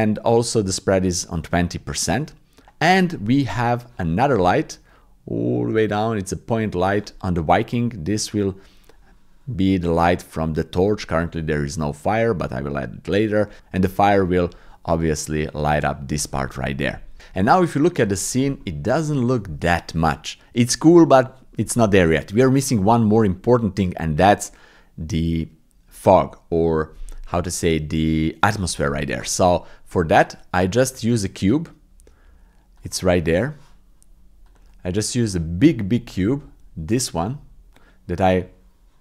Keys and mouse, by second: 2.6 ctrl+z, 17.4 ctrl+click, 18.1 ctrl+click, 18.6 shift+click, 19.0 shift+click, 32.8 click, 37.1 click, 37.8 click.